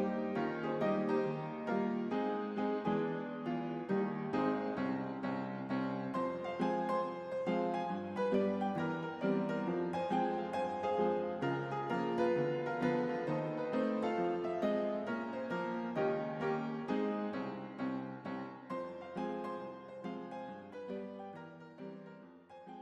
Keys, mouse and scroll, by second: 0.0-1.0 typing, 0.1 click, 0.9 click, 1.8-5.1 drag, 7.1 space.